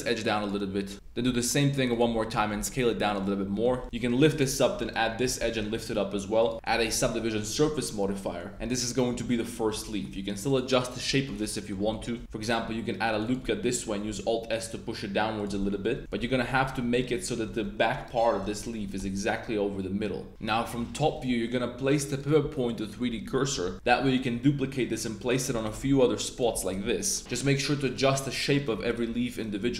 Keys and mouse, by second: 0.3 click, 0.9 KP_7, 2.3 s, 3.0 click, 3.2 middle click, 3.8 shift+middle click, 3.9 z, 4.2 click, 4.7 shift+click, 5.6 g, 5.7 z, 6.4 click, 6.5 Tab, 6.5 click, 6.7 super+1, 7.0 click, 7.5 Tab, 7.6 click, 8.1 click, 9.1 Tab, 9.3 click, 9.7 z, 9.8 click, 10.1 s, 10.4 click, 10.9 s, 11.5 click, 12.4 super+r, 13.2 click, 13.4 click, 14.0 alt+s, 15.5 Tab, 15.6 click, 16.0-19.0 typing, 16.2 Tab, 17.2 shift+drag, 17.9 right click, 20.3 click, 20.3 KP_7, 21.1 Tab, 22.1-22.7 drag, 23.0 Tab, 23.3 a, 23.6 a, 23.8 shift+d, 24.1 click, 24.3 r, 25.2 click, 25.5-27.3 typing, 26.3 click, 27.7 click, 28.6 click, 28.8 click.